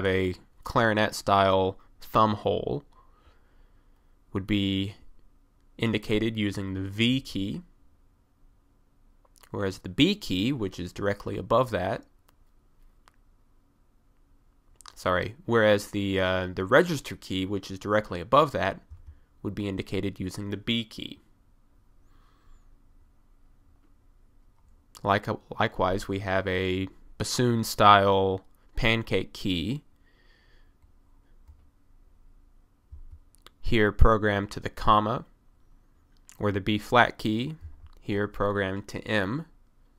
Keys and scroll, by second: 7.2 v, 19.0 b, 33.0 ,, 37.7 m.